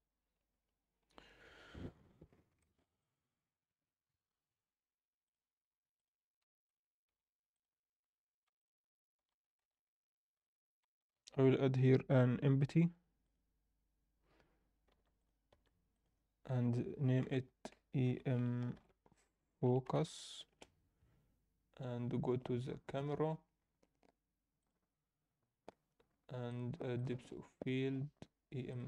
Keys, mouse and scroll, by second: 0.5 KP_0, 1.4 KP_0, 1.9 Tab, 1.9-2.4 scroll up 4, 2.6 alt+shift+middle click, 3.0 click, 5.4 click, 5.9 click, 6.5 Tab, 6.6 click, 7.0 Tab, 7.5 click, 8.5 shift+click, 9.6 shift+s, 10.8 Tab, 11.1 shift+a, 14.9 s, 15.5 s, 17.2 F2, 23.5-24.6 scroll down 1, 24.6 click, 24.6 scroll down 2, 25.6 scroll down 1, 26.5 click, 26.9-28.8 drag.